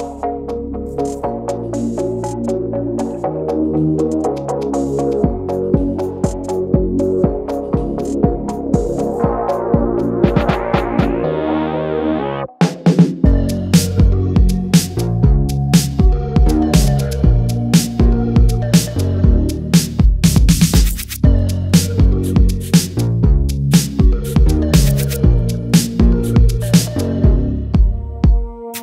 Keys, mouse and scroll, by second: 0.4-28.7 drag.